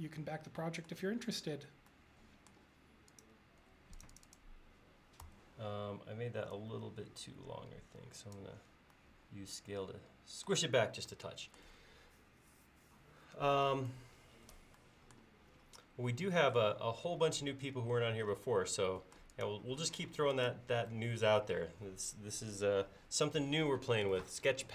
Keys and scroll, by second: 5.3 s, 20.1 space.